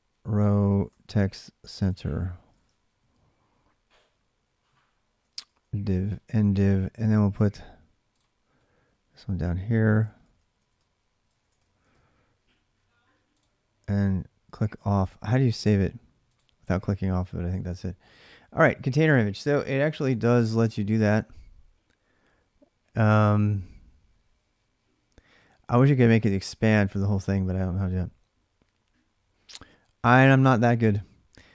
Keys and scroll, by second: 0.0-5.8 typing, 9.2-12.2 typing.